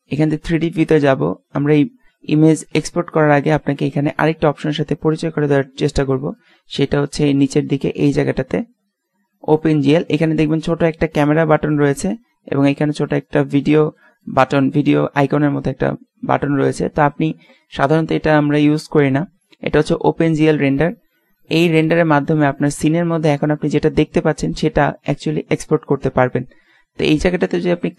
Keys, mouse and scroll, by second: 0.3-1.3 drag, 2.9 z, 3.4 z, 3.7 z, 27.9 click.